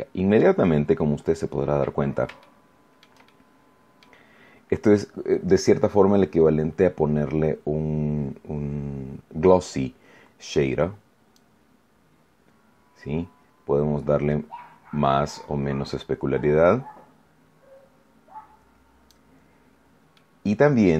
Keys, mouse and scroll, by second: 0.8-1.4 scroll up 2, 1.6 scroll down 2, 2.4 shift+middle click, 3.2 shift+middle click, 11.3-19.2 drag, 20.1-20.9 middle drag.